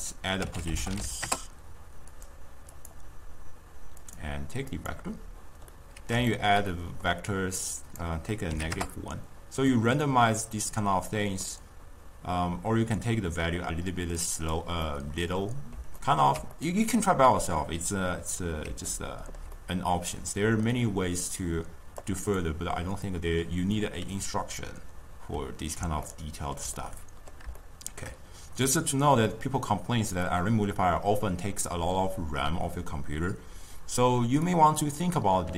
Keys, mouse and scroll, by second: 5.9-7.7 middle drag, 7.7-9.9 drag, 9.9-12.9 middle drag, 14.4 click, 14.9 scroll up 2, 15.0-22.2 middle drag, 22.2-26.2 drag, 26.2 scroll up 2, 26.4-30.5 ctrl+middle drag, 30.5-33.5 drag.